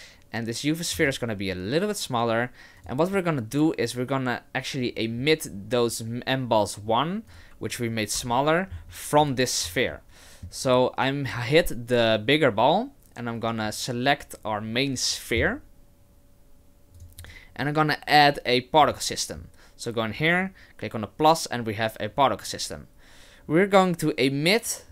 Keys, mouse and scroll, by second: 0.9 s, 7.3 right click, 8.2 h, 8.7-9.6 scroll up 4, 9.2 right click, 10.0 shift+middle click, 17.0 click, 17.2 click, 18.8 click.